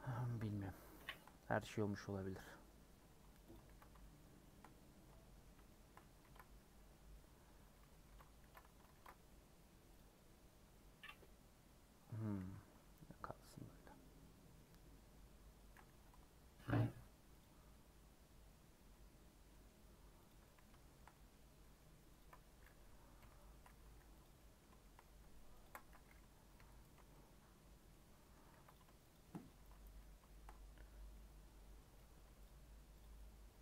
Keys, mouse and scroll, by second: 0.1 scroll up 1, 0.2 scroll down 5, 0.5 middle click, 0.7 scroll up 3, 1.1-2.6 shift+middle drag, 2.6-3.0 scroll up 4, 3.0 2, 3.5 click, 3.6 ctrl+x, 4.0 shift+middle click, 4.7 scroll down 2, 5.0-6.2 middle drag, 6.2 ctrl+z, 6.9 scroll down 2, 7.1 middle click, 7.4-7.7 scroll up 3, 7.8 middle click, 8.1 ctrl+x, 8.9 ctrl+r, 12.4 ctrl+z, 12.7 scroll down 2, 12.9 middle click, 13.5 middle click, 14.3-14.6 scroll up 1, 14.6-15.8 middle drag, 15.8 3, 16.7 alt+click, 17.4 alt+click, 19.6 middle click, 20.3 click, 20.4-22.2 middle drag, 22.2 ctrl+click, 23.2 ;, 23.8 3, 24.2 click, 24.3-25.6 middle drag, 25.6 ctrl+click, 26.5 ;, 27.0 scroll down 1, 27.1 middle click, 27.9 scroll up 1, 28.2 middle click, 28.7 click, 29.9 middle click, 30.6 scroll up 1, 31.0 scroll down 1, 31.1-32.1 middle drag, 32.1 3, 32.4 click, 33.0 click, 33.1-33.6 middle drag.